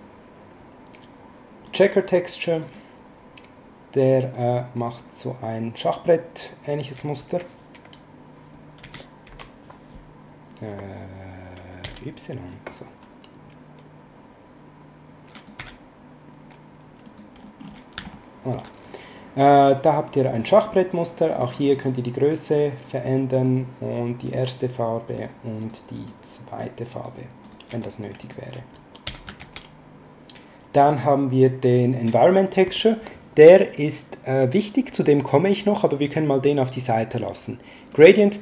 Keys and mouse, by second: 1.6 click, 4.1 click, 8.8 s, 9.3 z, 15.3 click, 15.5 s, 17.0 click, 18.1 shift+middle click, 20.4 click, 23.3 click, 25.1 click, 29.0 x, 29.4 shift+a, 37.9 click.